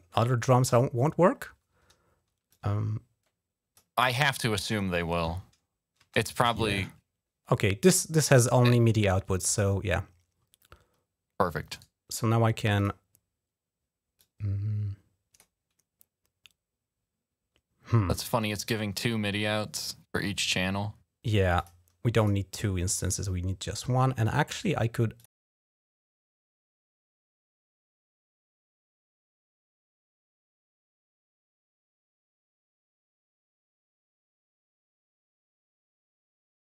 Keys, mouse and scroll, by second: 0.4 click, 2.3-3.5 drag, 3.9 space, 5.8 space, 11.5 right click, 12.5 click, 13.9-15.2 drag, 21.3 click, 22.0 click, 24.9 click, 32.6-33.7 drag, 34.0 click, 36.1-36.6 drag.